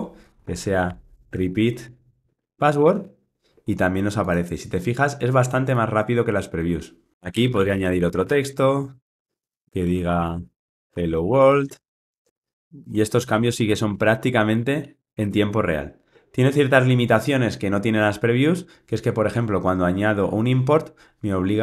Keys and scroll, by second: 8.9 Return.